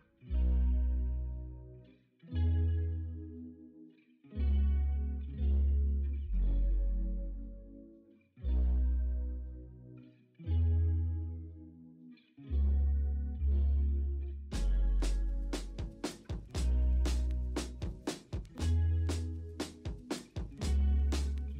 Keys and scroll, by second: 2.0 b, 2.4 x, 2.8 ctrl+z, 5.4 ctrl+z, 5.6 0, 7.3 x, 9.0 x, 10.6 x, 12.1 x, 12.8 x, 13.4 x, 15.3 x.